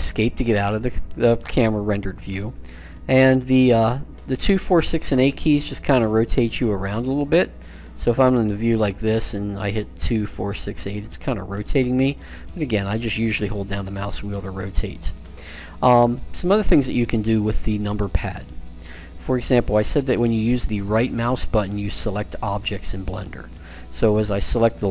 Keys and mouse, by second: 5.1 KP_2, 5.3 KP_2, 6.3 Escape, 6.9 Escape, 8.5 KP_6, 8.8 KP_6, 10.1-11.4 typing, 12.6 middle click, 12.9 middle click, 15.5-20.4 middle drag, 20.4-24.8 right drag.